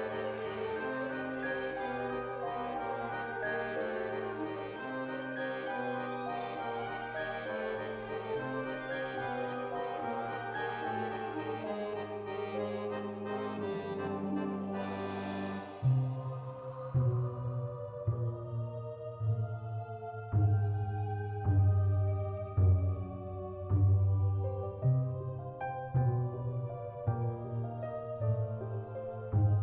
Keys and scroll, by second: 0.0 space, 6.8 space, 7.2 ctrl+s, 19.7 F9.